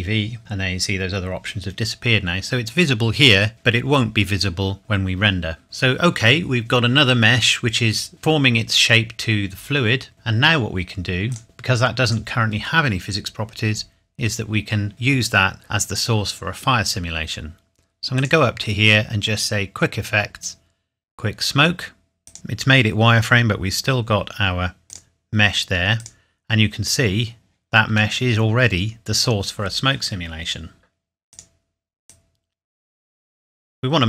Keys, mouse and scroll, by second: 5.6 ctrl+s, 11.3 click, 18.1 click, 22.2 click, 24.9 click, 28.1 middle click, 31.3 click.